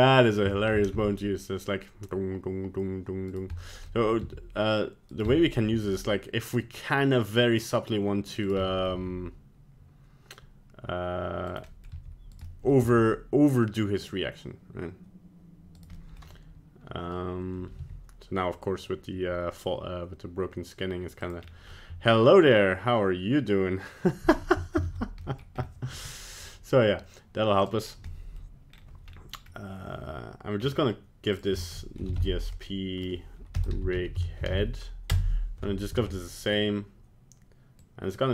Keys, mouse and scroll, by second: 0.3 click, 0.5 shift+middle click, 0.9 g, 3.6 middle click, 3.7 scroll down 1, 3.9 middle click, 4.3 g, 5.3 middle click, 5.6 middle click, 5.7 g, 8.7 middle click, 8.9 middle click, 8.9 g, 11.7 middle click, 11.9 g, 12.5 middle click, 12.9 g, 16.0 middle click, 16.1 middle click, 17.8 g, 21.4 scroll down 2, 21.7 middle click, 24.9 ctrl+z, 25.3 middle click, 25.6-25.9 scroll up 4, 25.9 g, 27.6 click, 27.9 scroll down 1, 28.1 middle click, 28.7-29.1 scroll up 1, 29.1 scroll down 1, 29.1 scroll down 1, 29.5-29.9 scroll up 1, 30.6 scroll down 5, 31.3 click, 35.8 scroll down 2, 36.2 middle click, 37.8 click.